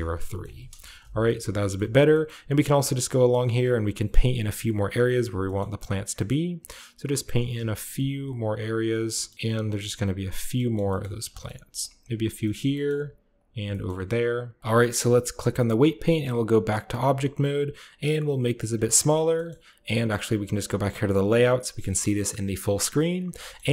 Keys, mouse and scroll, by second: 0.3 middle click, 0.5 KP_0, 1.3 shift+middle click, 1.7 shift+middle click, 2.2-3.9 shift+middle drag, 2.5 shift+click, 2.9 shift+click, 3.0 shift+click, 3.4 shift+click, 3.6 click, 3.8 click, 3.9 click, 4.2 click, 4.3 click, 4.4 click, 4.6 click, 5.0 click, 5.1 shift+click, 5.3-7.7 shift+middle drag, 5.3-6.1 typing, 5.6-7.7 shift+scroll up 1, 7.7 f, 7.9 click, 9.2 shift+scroll up 1, 9.8 click, 10.3-11.3 scroll down 1, 10.4-11.7 middle drag, 11.3 shift+scroll up 1, 11.5 f, 11.7 click, 11.9 middle click, 12.0-13.2 drag, 12.4-13.2 shift+scroll up 1, 13.2 middle click, 13.4-14.4 shift+drag, 14.4 middle click, 14.5 click, 14.6 ctrl+b, 14.6-15.6 shift+middle drag, 14.6-15.6 shift+scroll up 1, 15.6-18.6 drag, 16.9 a, 18.6-19.0 shift+middle drag, 19.0 shift+drag, 19.0-21.0 shift+scroll up 1, 19.0 shift+middle click, 19.2 shift+drag, 19.5 shift+middle click, 21.7-23.2 shift+middle drag, 21.9-22.8 shift+scroll up 1, 22.8-23.5 scroll up 1, 23.4-23.7 shift+drag.